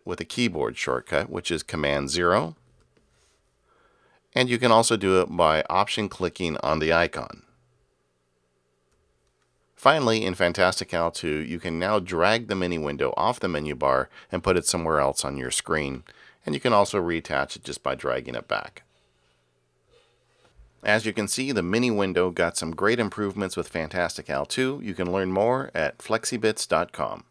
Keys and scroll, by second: 2.8 super+0.